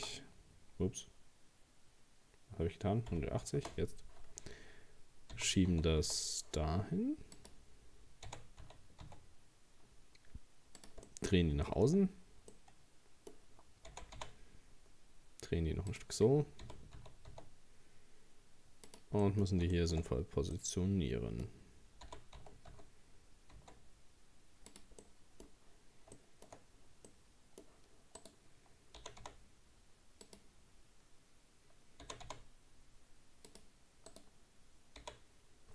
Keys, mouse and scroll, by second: 5.3 g, 8.3 r, 11.1 middle click, 11.6-12.5 shift+scroll up 2, 11.7 shift+middle click, 12.5-13.9 middle drag, 13.9 r, 16.6 g, 19.2 middle click, 20.1-20.6 scroll up 2, 20.6-22.1 middle drag, 22.1 g, 25.0 middle click, 25.5-26.2 scroll down 1, 26.2 shift+middle click, 26.7-27.1 scroll up 1, 27.1-28.2 middle drag, 28.2 right click, 29.0 g, 32.0 g, 34.1 right click, 35.0 h.